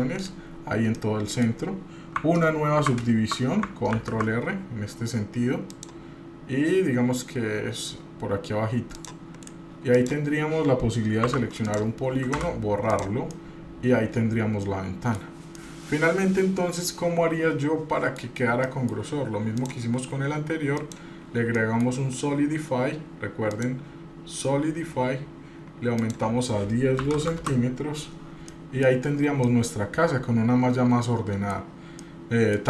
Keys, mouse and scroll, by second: 1.0 middle click, 3.9 ctrl+r, 9.4 right click, 10.0 click, 11.3 3, 11.6 click, 12.3 Delete, 13.3-15.2 middle drag, 15.6-18.2 middle drag, 18.3 scroll up 1, 18.6 middle click, 18.9 scroll down 1, 19.5-21.0 drag, 21.6 middle click, 23.5-25.1 drag, 26.0-28.0 drag, 28.5 middle click, 29.2 scroll up 1, 29.4-31.6 middle drag, 31.7 scroll down 2, 32.0 middle click.